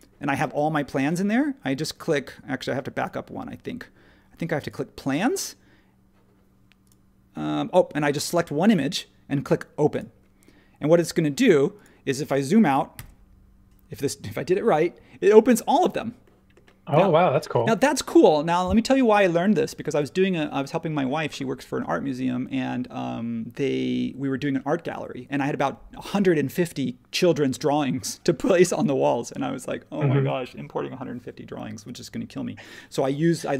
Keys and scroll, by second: 12.9 super+[.